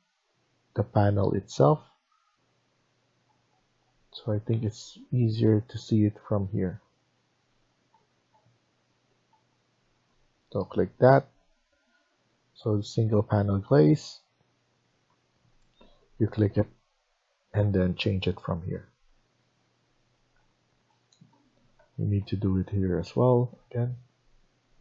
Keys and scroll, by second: 0.4 Tab, 1.4 Tab, 1.8 Tab, 2.4 Tab, 6.9 Tab, 7.5 Tab, 7.8 Tab, 8.2 Tab, 8.7 Tab, 9.2 Tab, 19.4 Escape, 20.7 Tab, 21.2 Tab, 21.7 Tab, 22.1 Tab, 22.5 Tab, 23.1 Tab, 23.4 Tab, 24.1 Tab, 24.5 Tab.